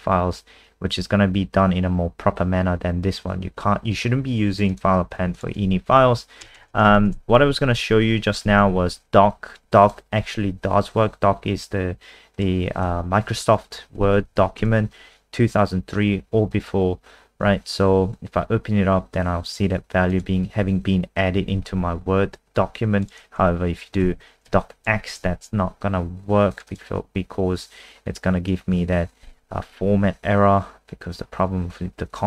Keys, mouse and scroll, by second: 4.7 click, 6.4-7.6 typing, 8.4 ctrl+s, 9.8 click, 10.2 F5, 12.3 click, 13.2 End, 13.9 Home, 14.1 Down, 14.3 Down, 14.6 Return, 19.1 click, 21.5 alt+F4, 23.0 click, 24.0 x, 24.5 ctrl+s, 25.1 F5, 26.5 click, 26.7 click.